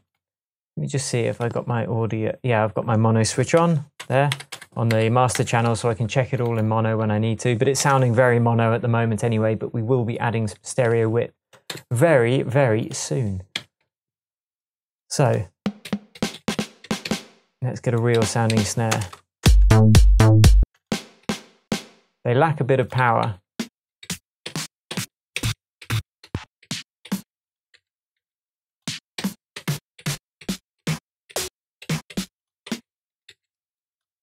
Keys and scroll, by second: 3.6-4.9 typing, 7.8 super+s, 11.7 Left, 13.6 Right, 15.8 Up, 16.2 Up, 16.5 Up, 16.8 Down, 18.2 Up, 18.5 Down, 18.9 space, 20.6 space, 21.2 Up, 21.7 Down, 23.0 Right, 23.2 Down, 24.0 Down, 24.5 Down, 25.4 Down, 25.8 Down, 27.7 Left, 28.2 Right, 29.2 Down, 30.5 Down, 31.3 Down, 31.8 Up, 32.7 Down, 33.1 Up, 33.3 Left.